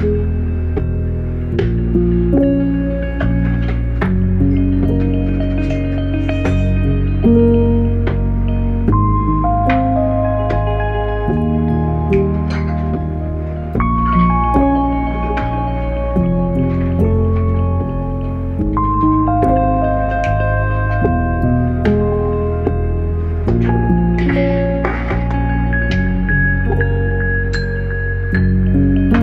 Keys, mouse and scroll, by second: 0.3-3.2 typing, 3.9 click, 19.1 ctrl+z, 20.2 click, 26.3-29.2 typing.